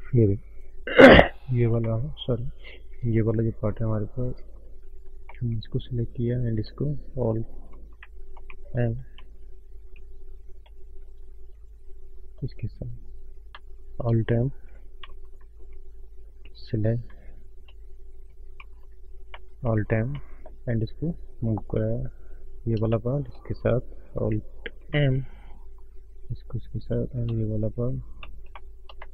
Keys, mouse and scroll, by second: 0.9 click, 1.3 middle click, 1.9 shift+middle click, 2.2-2.9 scroll up 2, 2.3 middle click, 3.4 click, 3.9 middle click, 3.9 scroll up 1, 5.3 middle click, 6.5 shift+click, 8.2 alt+m, 8.4 middle click, 9.4 ctrl+z, 10.6 middle click, 12.2 click, 13.0 middle click, 13.2-13.5 scroll up 1, 13.8 shift+click, 15.2 alt+m, 16.1 middle click, 16.1 scroll up 1, 16.7 click, 17.3 shift+click, 18.6 alt+m, 19.3 middle click, 20.1 scroll down 3, 20.4 middle click, 21.2 click, 22.5 click, 23.0 shift+click, 24.3 alt+m, 25.0 middle click, 26.1 click, 27.0 click, 27.5 middle click, 27.5 scroll up 1, 28.5 middle click.